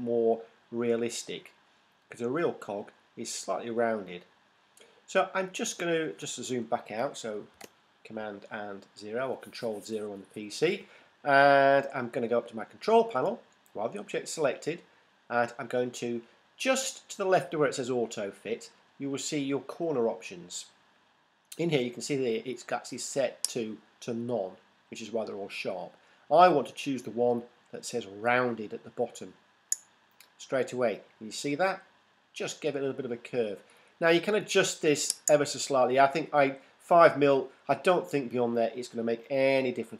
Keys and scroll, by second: 7.5 super+0.